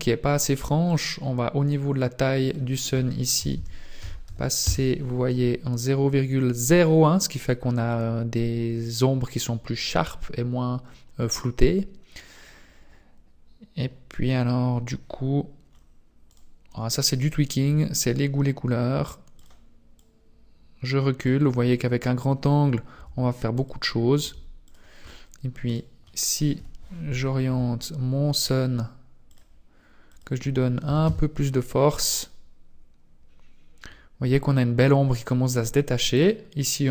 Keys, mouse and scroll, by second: 0.8 click, 2.4 click, 3.2 scroll down 9, 15.7-16.3 scroll up 3, 16.3 right click, 17.6 r, 19.8 click, 22.3 r, 23.8 r, 24.7-25.7 scroll down 5, 25.1 right click, 25.8 KP_7, 27.4 r, 29.8 click, 32.2-33.2 scroll up 2, 36.1 click.